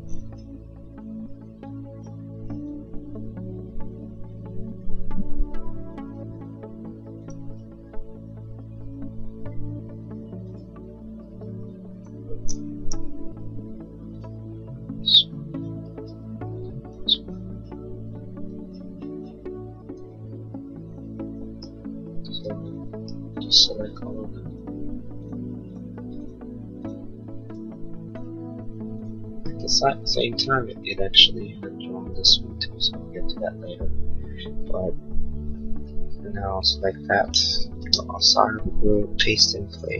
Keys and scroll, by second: 5.3 l, 11.2 e, 12.8 l, 16.0 e, 22.1 space, 37.3 ctrl+c, 37.7 space, 37.9 Escape.